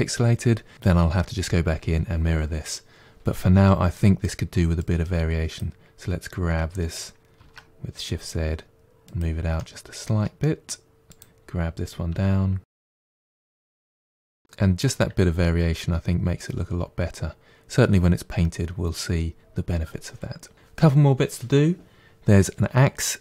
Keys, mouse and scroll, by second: 3.3 Tab, 3.8 middle click, 4.7 click, 6.4 g, 9.5-11.0 middle drag, 11.0 click, 12.0 g, 12.9 middle click, 13.1 click, 13.7 click, 14.0 middle click, 14.1 Tab, 14.2 scroll down 1, 14.3-17.2 middle drag.